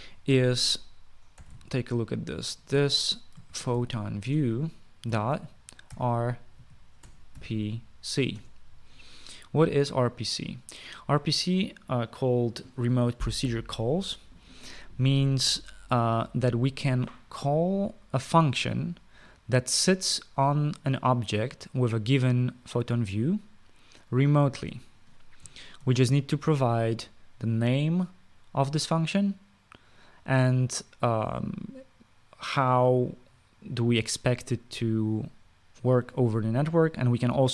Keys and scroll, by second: 1.9-8.6 typing, 9.1 Return, 26.6 (.